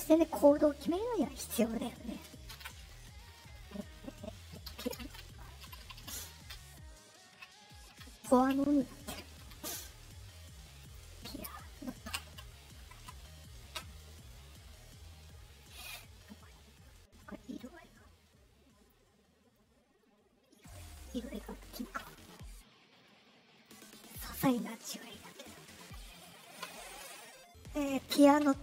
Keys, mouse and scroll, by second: 0.5 middle click, 0.5 scroll up 2, 5.8 BackSpace, 8.5 Left, 10.7 click, 11.7 click, 15.1 middle click, 15.8 click, 17.5 click, 21.8 Return, 23.5 scroll up 2, 24.2 click, 25.2 click, 25.7 Return.